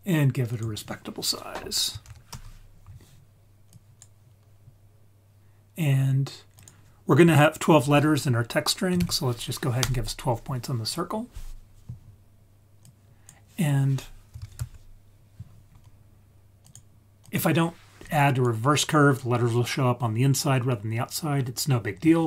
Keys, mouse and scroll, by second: 0.5 click, 3.7 click, 6.5-9.8 drag, 12.8-16.7 drag, 17.2 click, 18.0 click.